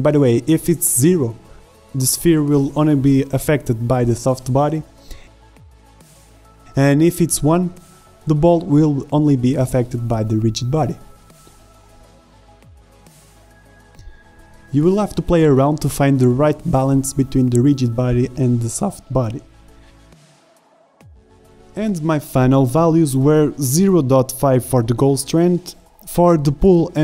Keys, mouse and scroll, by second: 0.4 alt+a, 0.7 shift+Left, 0.8 alt+a, 6.6 alt+a, 6.6 shift+Right, 7.5 shift+Left, 10.5 alt+a, 12.3 alt+a, 12.8 shift+Left, 13.2 alt+a, 14.5 alt+a, 14.9 shift+Left, 16.0-18.0 drag, 19.2 alt+a.